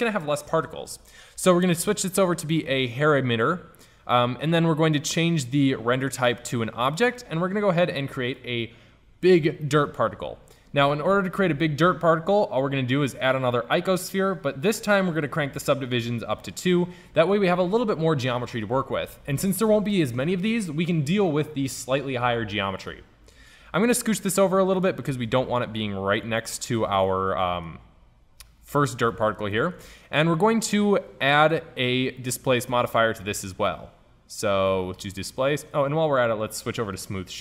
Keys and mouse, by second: 1.7-3.5 drag, 6.4-8.0 drag, 8.8-9.7 drag, 10.5 shift+a, 16.4-18.3 drag, 23.8-26.5 drag, 28.9-29.2 middle drag, 29.4 middle drag, 32.6-34.6 drag, 37.0-37.4 drag.